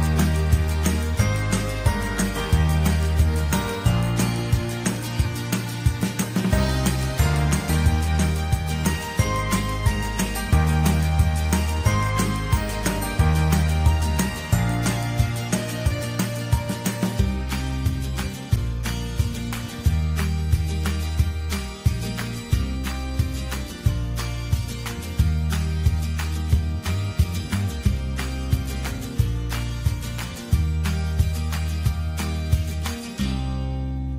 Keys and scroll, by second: 16.8 ctrl+j, 19.6 ctrl+t, 33.7 BackSpace.